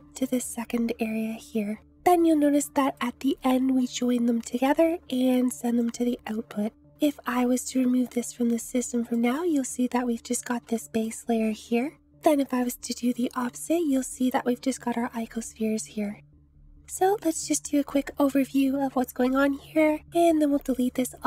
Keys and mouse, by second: 2.0 ctrl+z, 2.8 click, 5.8 click, 8.6 click, 10.7 shift+middle click.